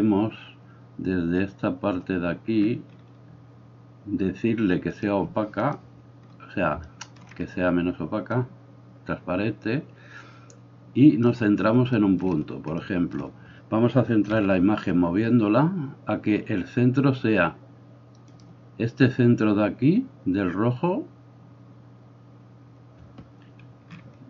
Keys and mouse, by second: 6.8-8.4 shift+middle drag, 8.4-18.4 drag, 14.4 g, 18.4-24.2 middle drag.